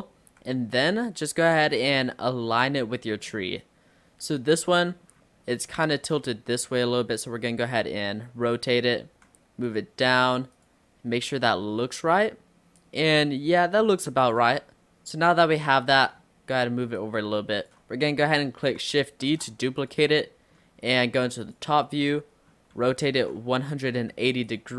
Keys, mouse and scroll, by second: 0.3 g, 2.2 shift+middle click, 2.9-3.3 scroll up 3, 3.3-5.2 middle drag, 5.2-5.7 scroll down 1, 5.9 click, 6.4-7.1 scroll up 2, 7.5 r, 9.1 g, 10.6 click, 11.3 scroll up 1, 11.4-12.8 middle drag, 12.8 click, 14.7-15.7 middle drag, 15.7 scroll down 1, 15.9 middle click, 16.2 scroll up 1, 17.0 click, 18.1-19.3 middle drag, 19.3 shift+d, 20.3-21.5 middle drag, 21.5 click, 22.2 scroll down 3, 22.8 r.